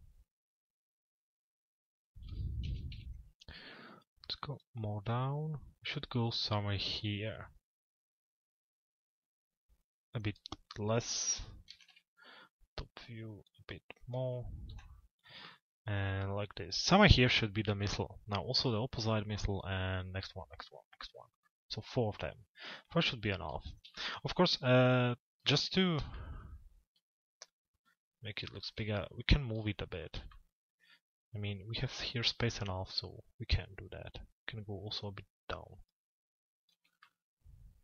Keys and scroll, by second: 2.9 z, 11.4 t, 11.9 z.